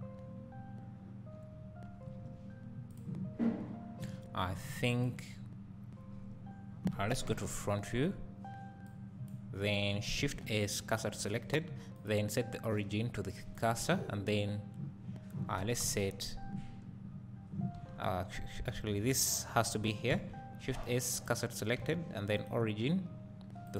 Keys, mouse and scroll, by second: 0.0-0.3 scroll down 1, 0.5-1.1 scroll up 2, 1.1-1.8 scroll up 1, 1.8 scroll up 1, 2.1 1, 2.9 click, 3.4-4.3 scroll down 2, 4.3-4.9 scroll down 1, 4.9 click, 4.9 shift+a, 6.1 scroll down 1, 7.3 KP_3, 8.9-12.0 drag, 11.6 Tab, 12.0-13.7 right drag, 17.9 right click, 18.0 Tab, 18.0 scroll up 2.